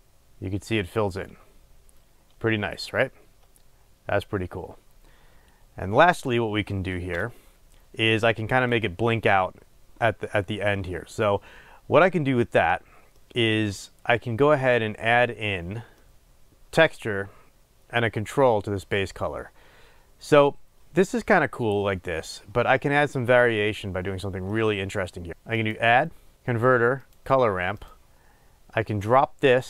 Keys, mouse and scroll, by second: 7.2 space, 7.4-29.6 drag.